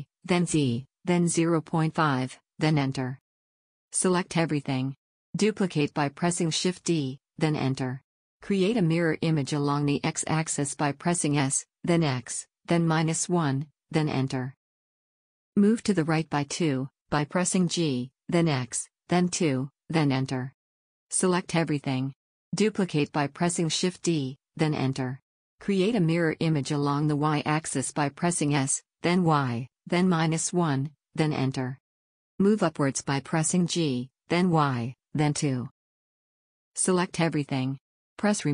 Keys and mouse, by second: 3.2 KP_1, 3.4 KP_7, 4.8 a, 5.0 a, 5.9 shift+d, 9.9 s, 14.5 g, 20.0 a, 20.3 a, 21.6 shift+d, 24.7 s, 31.5 g, 35.5 a, 35.7 a, 37.2-38.5 drag.